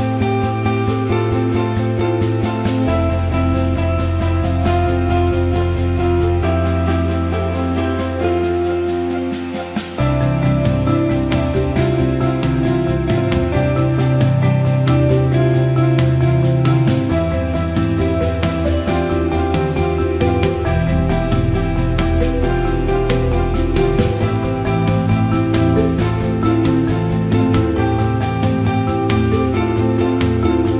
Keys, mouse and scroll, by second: 1.0 click, 2.4 alt+shift+middle click, 3.5 click, 4.7 Tab, 5.7 alt+shift+middle click, 7.2 click, 7.8-16.3 drag, 17.6 click, 17.9 alt+middle click, 18.5 click, 18.8 alt+middle click, 19.7 e, 22.7-23.7 alt+middle drag, 24.7 s, 26.6 alt+middle click, 27.4 click, 28.4-29.5 drag, 29.5-30.7 alt+middle drag.